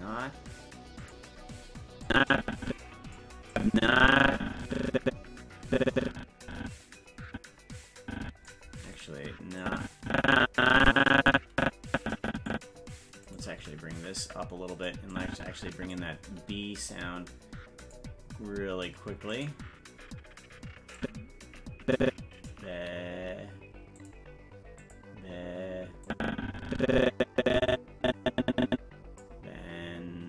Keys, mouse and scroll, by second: 1.0 click, 2.1-3.1 drag, 3.5-8.5 drag, 8.9 right click, 9.6-12.5 drag, 13.2 right click, 13.6 g, 15.1 click, 17.8 click, 19.3 click, 21.0-22.5 drag, 24.0 click, 24.8 click, 26.1-29.2 drag.